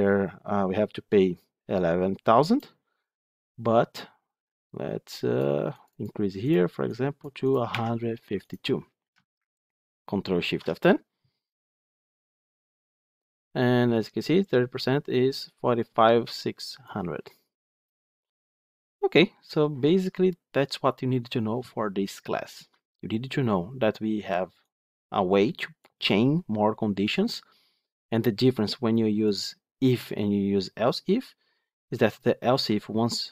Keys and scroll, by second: 10.3 ctrl+shift+F10.